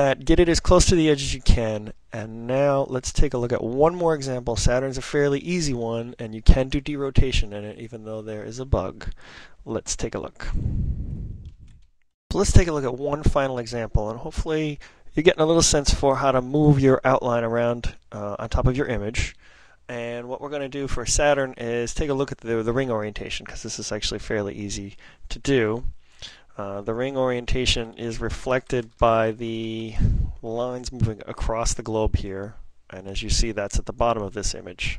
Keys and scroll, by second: 27.3 ctrl+super+n, 27.8 ctrl+super+n, 28.0 ctrl+super+n.